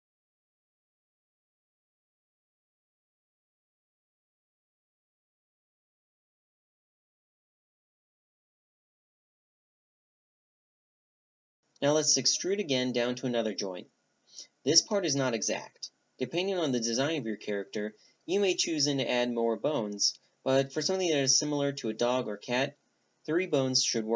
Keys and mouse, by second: 0.1-1.5 middle drag, 1.5-4.0 drag, 4.0-6.5 middle drag, 8.0 a, 8.2-9.7 drag, 9.7 Tab, 10.6 Tab, 11.3 z, 12.0-12.8 middle drag, 12.8 e, 15.2-15.9 drag, 15.9-20.1 middle drag, 20.1-21.3 drag, 22.0 click, 22.9-24.1 drag.